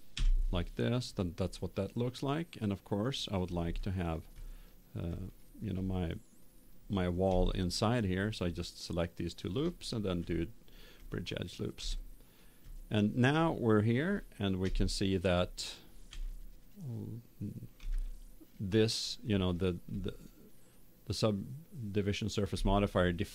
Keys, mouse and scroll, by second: 3.0 F12, 3.8 click, 6.0-7.8 middle drag, 8.6-10.7 right drag, 10.1 w, 11.8-14.5 middle drag, 14.6 KP_0, 16.1 Tab, 16.7 middle click, 20.2-23.3 middle drag.